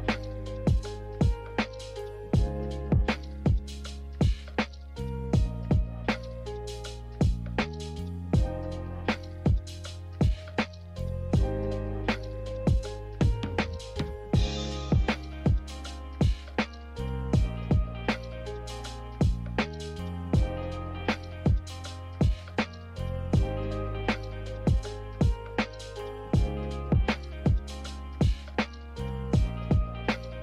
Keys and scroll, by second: 18.0 z.